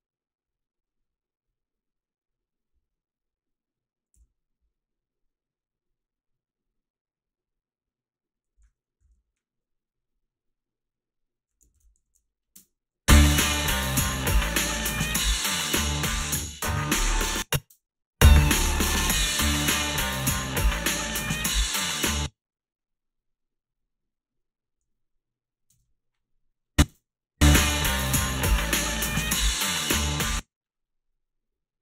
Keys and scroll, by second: 4.1 f, 9.1 a, 11.7 ctrl+r, 12.0 a, 12.6 space, 17.0 space, 17.7 space, 22.0 space, 25.2 space, 25.7 space, 26.9 space, 30.1 space.